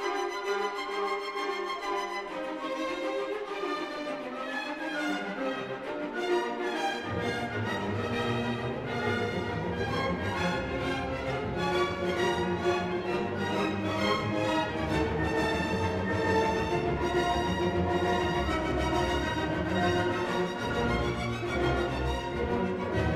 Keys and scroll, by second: 13.5 Return.